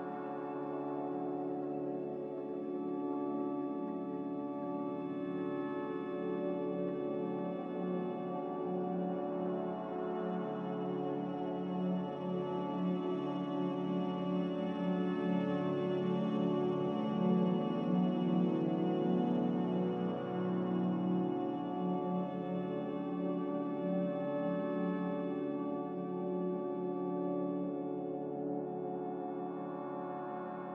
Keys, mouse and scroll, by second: 11.9 z, 14.0 Delete, 16.3 Delete, 28.4 a, 29.3 Delete, 30.1 Delete.